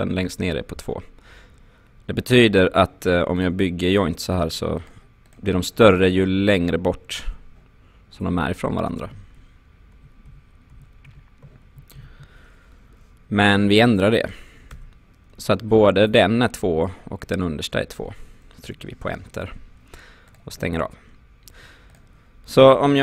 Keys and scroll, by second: 9.1 ctrl+z, 12.0 ctrl+z, 14.8 2, 18.7 Return.